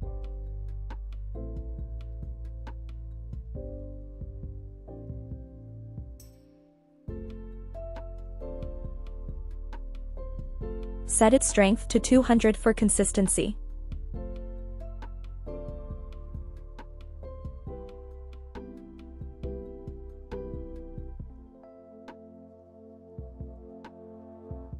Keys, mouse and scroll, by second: 0.0 click, 1.9 g, 10.1 click, 10.9-12.4 drag, 12.4 KP_0, 14.7 KP_0, 19.5 KP_7, 20.6 g, 24.0-24.4 drag.